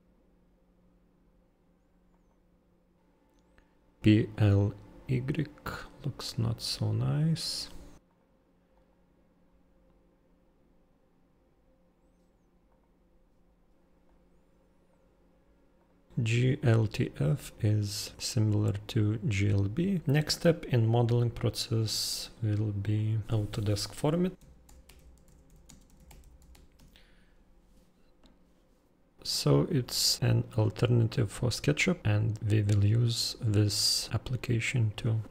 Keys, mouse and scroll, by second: 7.6 click, 8.7 right click, 12.5 click, 15.7 click, 18.1-22.0 drag, 22.8-24.7 drag, 24.2-27.0 typing.